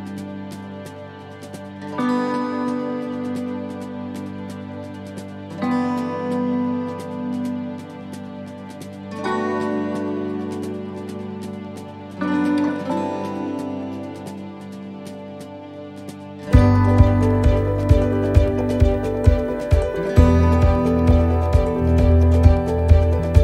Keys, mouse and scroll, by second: 7.2 click, 7.2 s, 9.1 middle click, 10.7 click, 12.4 shift+middle click, 12.9-13.5 scroll up 1, 15.8 click, 21.1 click, 21.2 s.